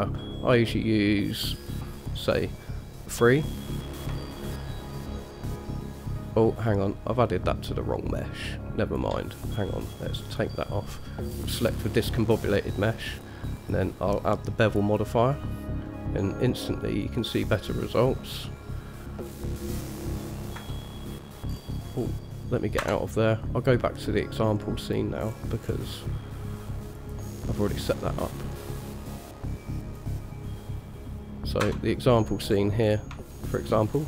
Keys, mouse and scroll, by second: 1.8 click, 2.1 click, 4.4-9.2 shift+drag, 10.4 click, 11.5 click, 13.3 drag, 15.4 click, 17.2 click, 18.5-19.7 drag, 19.7-20.4 scroll down 1, 20.4-20.8 scroll down 1, 20.8 KP_0, 21.7-22.2 scroll up 2, 22.2 scroll down 2, 23.0 KP_0, 25.1 click, 25.4-26.6 scroll up 3, 27.2 click, 28.5 click, 30.6 click, 31.8 KP_0, 32.7-33.3 scroll down 2, 33.3 scroll down 2, 33.5-33.8 shift+middle drag.